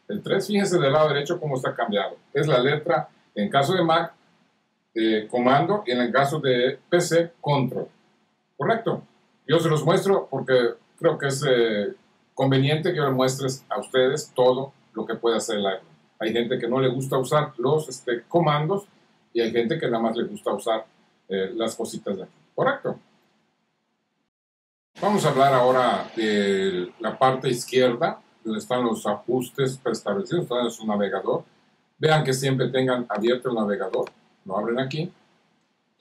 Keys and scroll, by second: 1.1 super+4, 6.8 super+6, 8.2 super+7, 9.0 super+8.